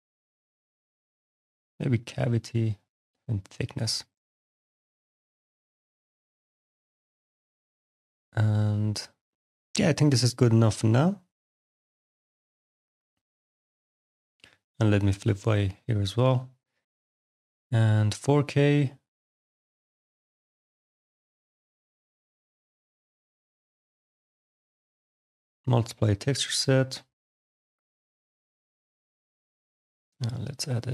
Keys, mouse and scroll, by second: 1.6 click, 2.6 click, 3.8 click, 5.0 click, 5.7-7.2 scroll, 8.2-9.0 scroll, 9.0-9.9 scroll, 9.9-10.7 scroll, 10.7 click, 13.4 click, 14.5 click, 15.5 click, 17.6 click, 21.2 click, 24.5 click, 29.6 click.